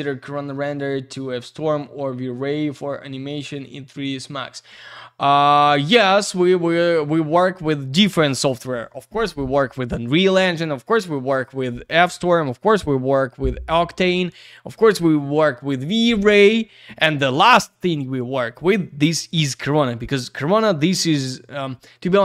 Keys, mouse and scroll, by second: 0.4 click, 0.7 click, 1.4 click, 1.8 click, 2.4 click, 2.6 click, 2.8 click, 3.6 click, 3.8 click, 4.8 click, 4.9 click, 5.4 click, 8.0 click, 8.2 click.